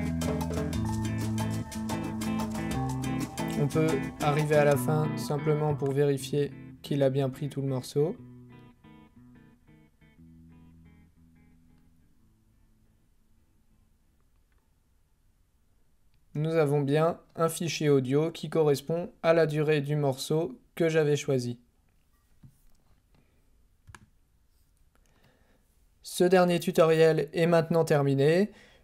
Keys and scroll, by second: 16.1 space.